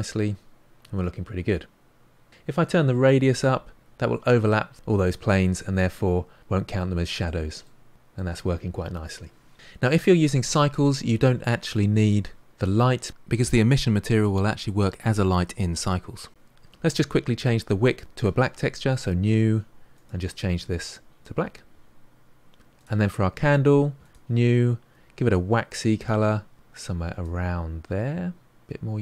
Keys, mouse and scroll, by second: 2.3-6.6 drag, 6.6-16.3 middle drag, 16.3 click, 19.0-20.9 drag, 22.8 click, 24.1-26.0 drag.